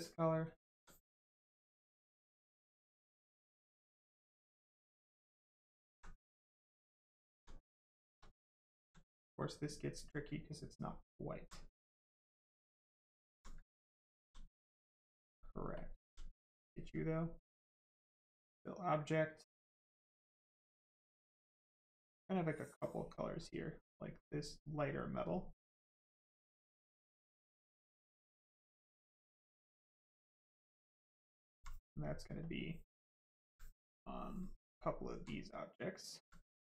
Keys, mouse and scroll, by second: 0.4 alt+click, 1.5 click, 2.3 right click, 3.2 alt+click, 4.4 click, 5.2 alt+click, 6.3 click, 7.0 alt+click, 7.6 right click, 7.8 shift+right click, 8.2 alt+right click, 9.8 right click, 9.8 right click, 10.4 alt+right click, 11.5 right click, 11.6 right click, 12.9 alt+right click, 14.0 alt+click, 14.4 right click, 15.7 alt+click, 17.5 click, 19.8 click, 22.3 click, 26.8 click, 29.8 click, 31.1 alt+click, 32.4 click, 33.9 click, 34.5 alt+right click, 35.3 right click, 35.4 right click, 35.8 alt+right click, 36.6 alt+click.